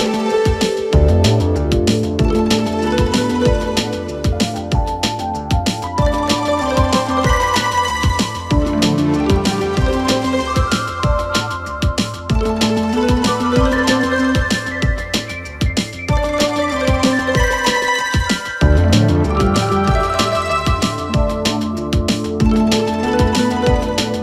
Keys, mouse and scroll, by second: 0.2 s, 0.7 s, 1.1-1.8 scroll up 2, 2.0 click, 3.1-3.7 scroll up 5, 3.7 s, 4.5 s, 5.3 s, 5.8-6.2 scroll up 2, 6.2 g, 7.8 KP_3, 8.9 drag, 10.5 KP_1, 11.5 shift+middle click, 12.0-13.8 scroll up 6, 12.5 shift+middle click, 13.8 s, 14.7-15.3 scroll up 2, 15.3 r, 16.6 g, 19.2 s, 20.9-21.4 scroll up 2, 21.4 s, 22.2 g.